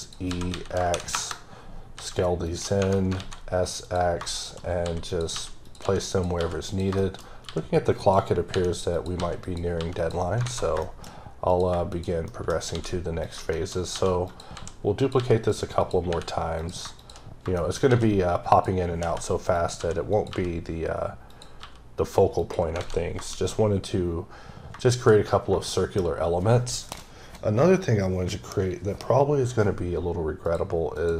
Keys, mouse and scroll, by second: 0.0 click, 0.3 s, 0.7 KP_0, 1.1 KP_Enter, 2.0 s, 2.4 click, 2.8 Tab, 2.9 scroll down 3, 3.2 x, 3.8 click, 4.4 double click, 4.8 s, 5.1 click, 5.3 g, 5.6 click, 5.8 s, 6.1 click, 6.4 g, 7.0 shift+middle click, 7.2 scroll down 1, 7.4 g, 8.0 click, 8.5 r, 8.9 click, 9.2 s, 9.4 click, 9.8 g, 10.0 click, 10.3 scroll down 3, 10.4 alt+a, 10.8 shift+middle click, 11.0-11.5 scroll down 1, 11.5 click, 12.3 shift+middle click, 12.7 shift+d, 13.2 click, 13.5 shift+middle click, 13.9 g, 14.3 click, 14.6 s, 15.0 click, 15.2 g, 15.5 click, 15.8 click, 16.1 r, 16.6 click, 17.3 scroll down 3, 17.6 shift+middle click, 17.9 shift+d, 18.5 click, 19.0 g, 19.6 click, 19.8 s, 20.1 click, 20.3 g, 21.3 click, 21.6 g, 22.4 click, 22.8 alt+a, 23.1 scroll down 1, 23.3 shift+middle click, 23.7 scroll up 2, 24.6 scroll down 1, 25.7 shift+middle click, 25.9-28.4 shift+scroll down 2, 30.4 click, 30.9 click.